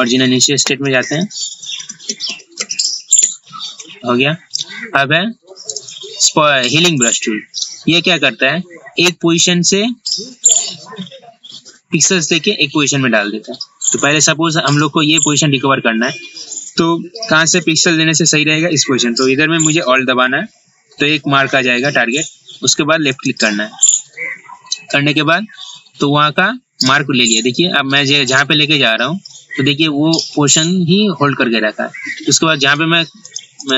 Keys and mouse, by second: 0.0 ctrl+z, 0.2 ctrl+z, 0.4 ctrl+z, 0.5-3.3 typing, 5.8 right click, 7.1 click, 23.2 alt+click.